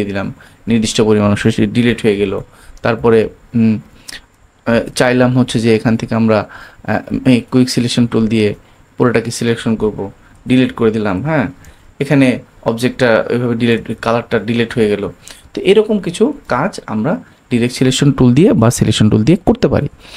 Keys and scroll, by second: 2.2 super+z, 3.1 super+z, 4.8 super+d, 12.8 super+d, 15.5 super+z.